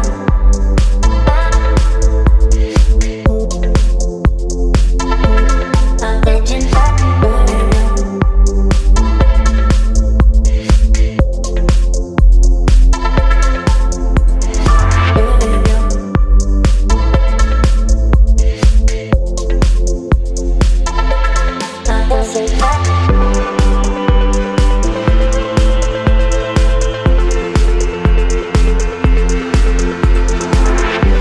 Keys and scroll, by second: 1.1 Return, 3.2 ctrl+m, 20.9 Return.